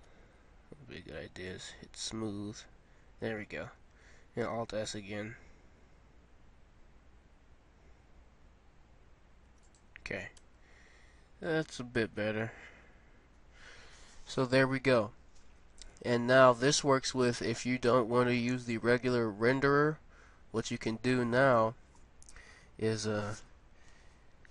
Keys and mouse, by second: 0.0 w, 4.3 alt+s, 10.4 Tab, 12.3 middle click, 12.9 middle click, 17.3-19.7 middle drag, 23.8 KP_0.